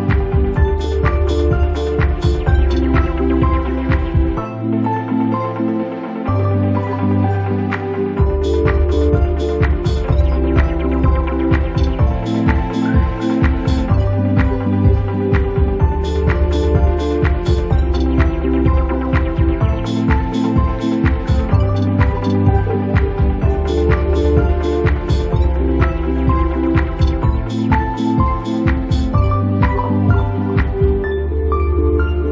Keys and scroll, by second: 1.7 space, 2.9 space, 9.6 space.